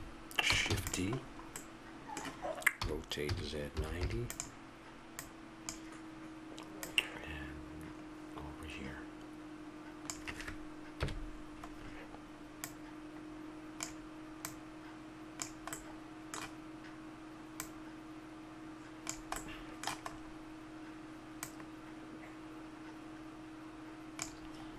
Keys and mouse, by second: 0.7 shift+d, 1.2 click, 2.8 r, 5.2-8.8 drag, 11.0 KP_Decimal, 12.6-15.8 drag, 15.8-17.6 middle drag, 17.6-19.3 drag, 19.4 middle click, 21.4-23.3 drag.